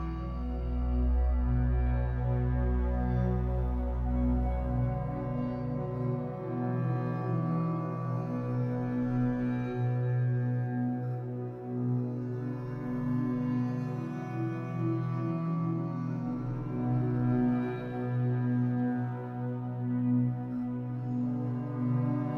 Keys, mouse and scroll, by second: 0.4 z, 1.0-1.9 scroll up 2, 1.9-3.0 drag, 3.0 g, 3.5 click, 4.1-8.5 middle drag, 4.9 KP_1, 6.0 b, 8.5 click, 8.7 scroll down 1, 9.0 shift+middle click, 9.4-9.8 scroll up 2, 9.8-12.9 drag, 12.9 shift+d, 14.8 right click, 15.4 ctrl+z, 16.2 click, 16.8 g, 18.3 click, 18.7 g, 20.2 click, 21.0 shift+click, 21.3-22.3 middle drag.